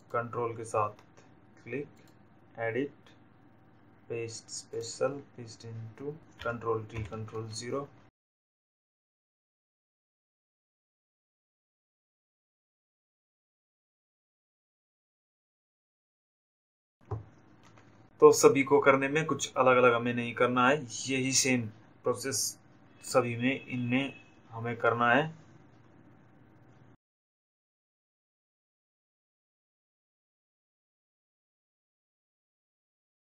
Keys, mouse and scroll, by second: 0.7 ctrl+click, 2.4 click, 4.3 click, 6.2 ctrl+t, 6.6 ctrl+0, 8.1-9.4 shift+drag, 10.6 click, 11.9-12.2 ctrl+alt+scroll up 1, 17.1 click, 27.7 click, 29.4 click, 31.6 ctrl+c, 32.1 click.